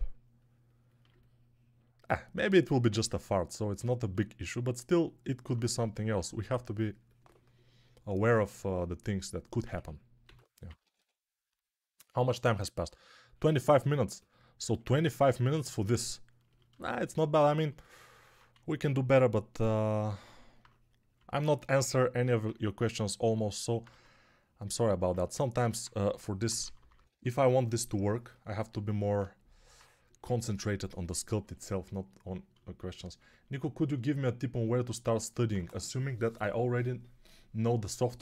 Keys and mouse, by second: 0.9-4.0 alt+drag, 0.9-4.0 alt+middle drag, 0.9-4.0 alt+right drag, 5.9 2, 9.6-10.8 typing, 18.4 1, 23.8 2, 25.9-27.7 typing.